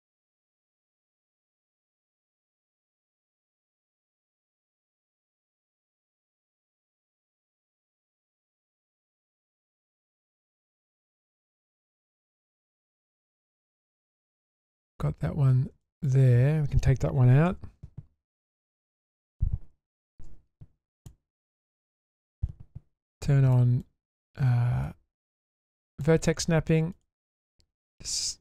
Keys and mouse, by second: 1.3 middle click, 3.2-3.8 shift+middle drag, 4.5-5.1 shift+middle drag, 5.7-7.8 middle drag, 8.2 Tab, 9.2 middle click, 9.9 Tab, 10.2-10.7 middle drag, 10.9 shift+middle drag, 11.4 middle click, 12.5 shift+middle drag, 13.6 alt+click, 14.6 shift+middle drag, 15.8 shift+middle drag, 17.5 ctrl+x, 18.2-18.6 shift+middle drag, 20.3 1, 23.1-23.8 drag, 24.9-26.0 drag, 27.5-28.4 ctrl+drag.